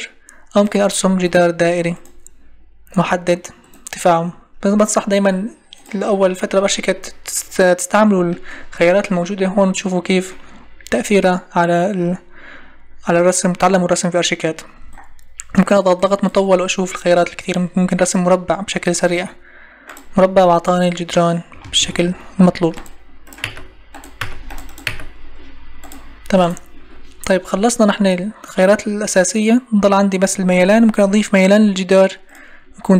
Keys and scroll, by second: 4.3 Escape, 21.6 Escape, 23.4 Delete.